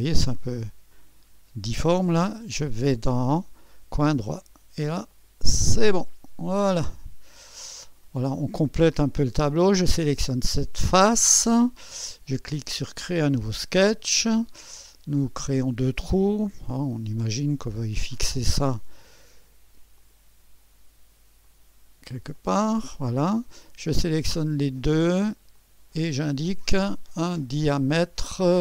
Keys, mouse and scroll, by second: 0.4 right click, 1.4 right click, 3.3-5.1 drag, 5.2-6.2 drag, 6.2-7.7 scroll down 2, 6.8-9.0 drag, 8.5-9.7 scroll up 2, 9.0 right click, 10.2 click, 12.6-13.6 drag, 15.4-16.6 drag, 19.1-21.1 drag, 21.5 right click, 22.4-23.4 drag, 23.0-24.7 right drag, 24.7 click, 25.5 click, 26.4 click.